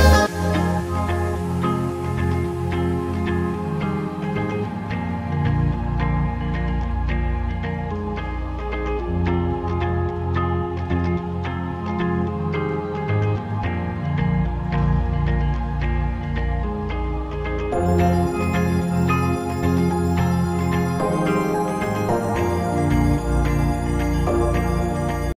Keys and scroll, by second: 1.3 ctrl+q, 20.8 F9.